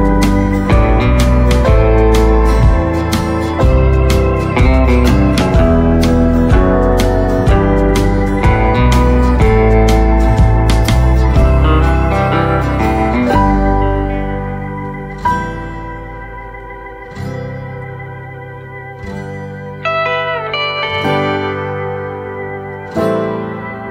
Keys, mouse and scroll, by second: 1.9 right click, 2.4 click, 3.3 right click, 6.8 click, 9.3-9.8 scroll up 1, 9.8 right click, 10.3-10.8 scroll up 1, 10.9 click, 12.8 ctrl+z, 13.3 click, 16.6-17.8 typing, 19.0 click, 21.9 right click.